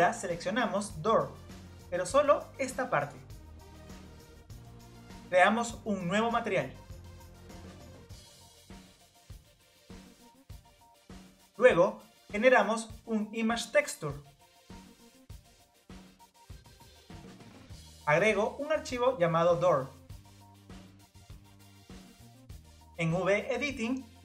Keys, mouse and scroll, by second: 1.4-2.6 drag, 2.6 scroll up 1, 4.5-6.9 click, 6.9-10.5 drag, 10.6-12.1 drag, 12.1 o, 16.6-21.5 drag.